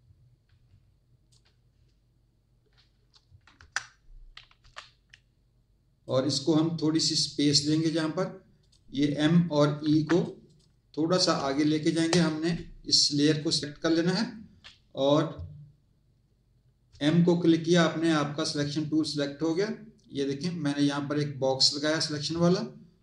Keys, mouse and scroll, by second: 3.5 Return, 5.0 click, 6.9 click, 8.5 click, 9.8 z, 10.1 click, 11.3 space, 11.4 click, 13.3 click, 16.9 m, 19.5 click.